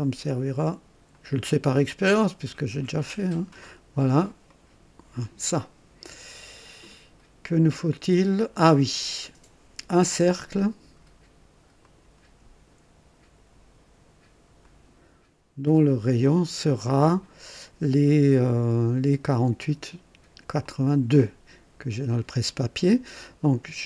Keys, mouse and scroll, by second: 1.1 click, 3.3 click, 4.5 right click, 11.8 click, 14.6 click, 15.8 click, 16.7 right click, 19.2 click, 20.6 click.